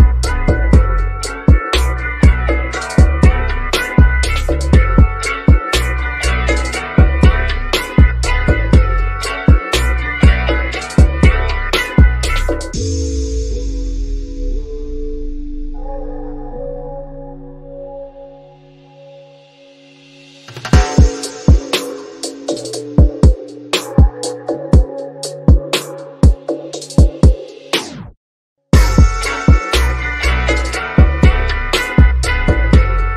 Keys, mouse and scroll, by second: 2.7 1, 4.9 Return, 8.0 ctrl+z, 10.1 click, 11.1 shift+click, 12.5-13.0 scroll up 1, 13.7 click, 17.5 1, 18.7 Return, 21.5-21.9 scroll down 1, 22.2 shift+middle click, 22.9-23.3 scroll down 1, 23.3 middle click, 24.2 click, 24.7-26.8 middle drag, 26.8 shift+click, 27.6 scroll up 1, 28.8 click, 32.4 1.